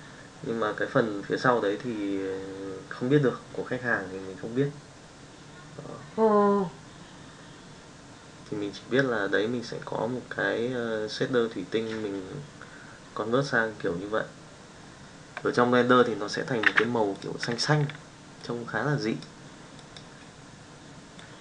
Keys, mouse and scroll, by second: 16.6 n, 18.4 click, 19.8 click, 21.2 click.